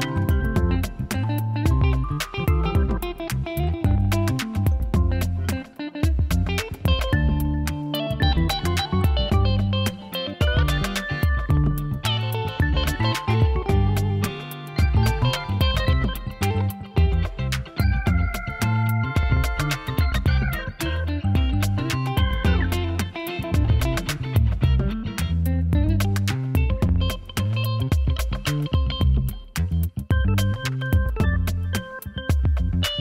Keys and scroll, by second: 6.6 ctrl+z, 19.0 ctrl+z.